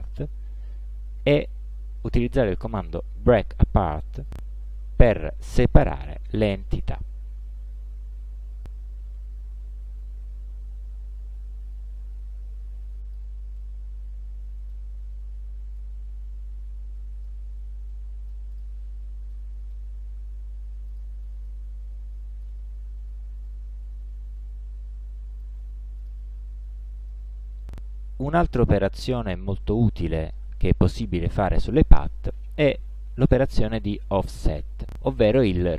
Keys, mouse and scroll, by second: 1.5 click, 4.3 click, 5.1 click, 6.3 click, 8.6 click, 11.8-13.4 drag, 13.7-15.0 middle drag, 15.9-17.6 drag, 18.0 middle click, 18.6 click, 19.4 middle click, 21.0 ctrl+click, 21.6 ctrl+d, 21.6-22.7 ctrl+drag, 23.6-25.7 shift+drag, 26.1 ctrl+click, 26.7 ctrl+middle click.